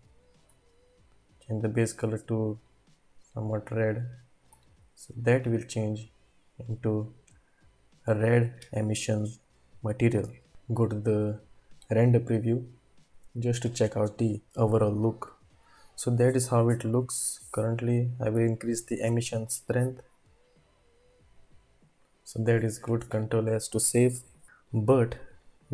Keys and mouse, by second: 1.5 click, 5.4 typing, 19.4-22.8 drag.